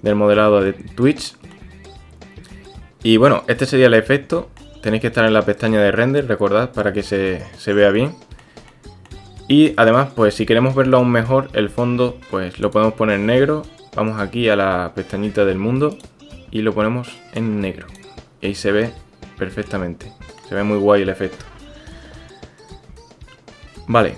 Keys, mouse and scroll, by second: 0.7-1.3 drag, 1.5-4.6 drag, 7.1 click, 7.9 click, 8.7 shift+click, 10.7-11.3 drag, 15.9 click, 18.4-20.4 drag.